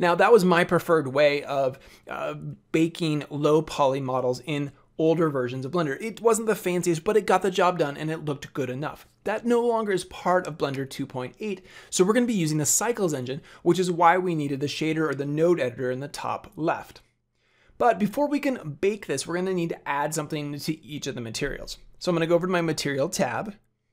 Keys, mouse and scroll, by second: 23.3 click.